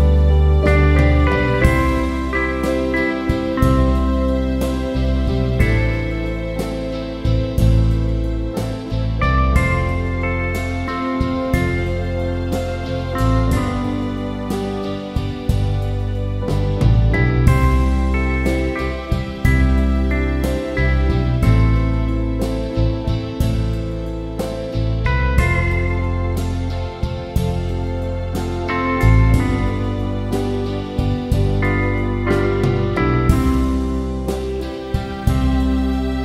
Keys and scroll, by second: 0.4 Return, 34.4 ctrl+-, 35.2 ctrl+=.